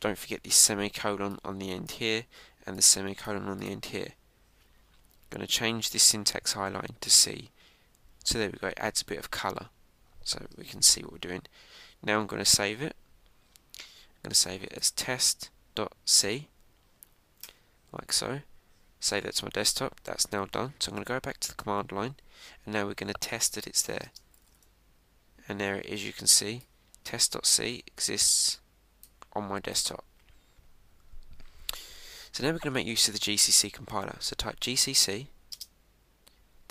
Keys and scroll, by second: 11.5 super+s, 18.4 Return, 21.8 super+Tab, 25.4 Return.